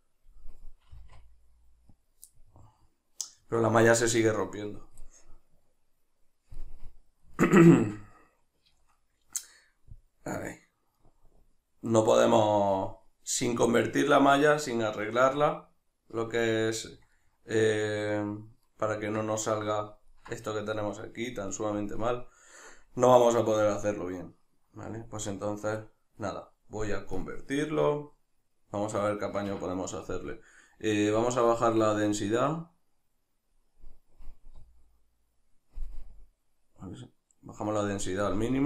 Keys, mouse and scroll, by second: 1.0-2.1 drag, 1.0 r, 2.3-24.9 middle drag, 15.4 Tab, 24.9-38.6 drag, 29.3 Escape, 34.6 z, 38.4 z.